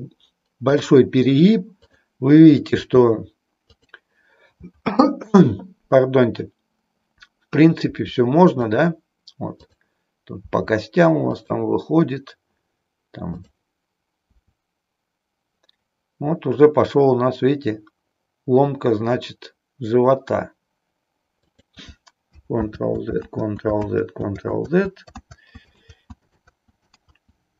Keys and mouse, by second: 0.6 click, 1.6 click, 2.8 r, 7.9 r, 9.6 click, 10.4 r, 14.4 r, 21.5 click, 22.6 ctrl+z, 23.4 ctrl+z, 24.0 click, 25.3 ctrl+z, 25.9 ctrl+z, 26.4 ctrl+z.